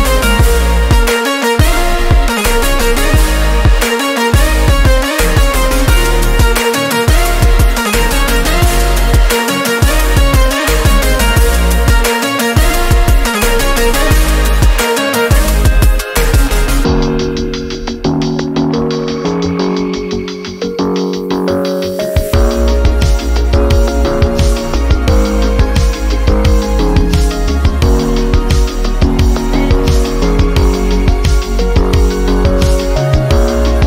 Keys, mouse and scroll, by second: 7.0 click, 14.5 click, 14.5-15.3 typing, 17.0 space, 18.6 shift+7, 18.7 shift+space, 20.5 space, 23.6-32.8 drag, 33.1-33.8 alt+drag, 33.1 typing.